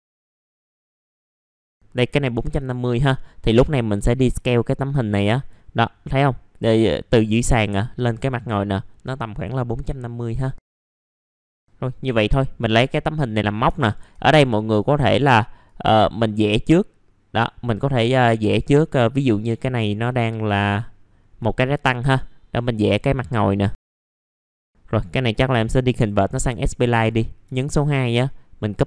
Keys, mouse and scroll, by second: 0.0 middle click, 0.2 scroll up 1, 0.4 F3, 0.4 click, 0.6 F3, 0.6 middle click, 0.7 scroll down 1, 0.9 middle click, 1.4 click, 2.6-6.1 drag, 9.8 middle click, 10.5 click, 11.4 middle click, 11.5 scroll down 1, 11.6 Delete, 11.7 middle click, 13.4 scroll up 1, 13.8 ctrl+right click, 14.7-17.9 drag, 17.9 middle click, 20.1-20.6 scroll down 1, 21.4 click, 22.5 middle click, 22.9 scroll up 1, 23.9 middle click, 25.9-27.9 drag, 28.1 shift+click.